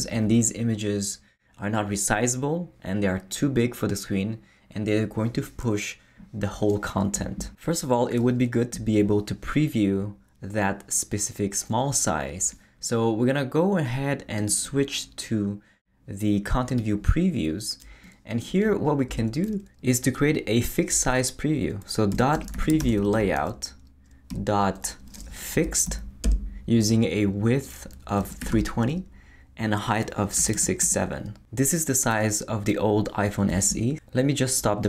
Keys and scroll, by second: 19.1 Return, 21.9-24.3 typing, 25.5 Down, 26.2 Return, 28.0-29.0 typing, 30.4 6, 30.8 7.